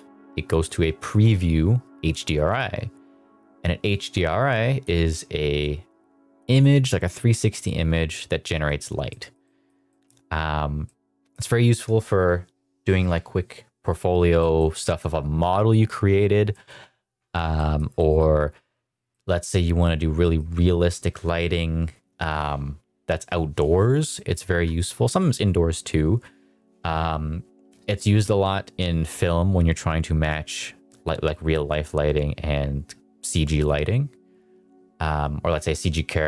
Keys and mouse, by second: 6.5-8.6 middle drag, 9.0 middle drag, 9.3 middle drag, 9.8 middle drag, 10.8-11.2 middle drag, 14.3 middle click, 14.7 shift+middle click, 16.4 middle drag, 17.5 middle drag, 17.9 middle drag, 19.0-19.7 middle drag, 20.1 middle click, 24.1 middle drag, 24.7 middle click.